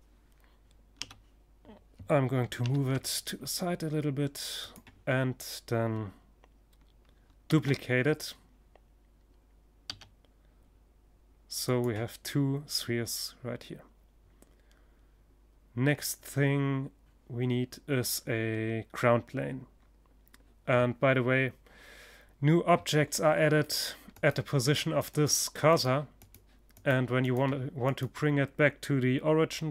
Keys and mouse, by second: 3.2-5.0 drag, 6.0 shift+d, 10.3-12.0 drag, 22.6-28.0 drag, 28.0 middle click, 29.5 shift+s.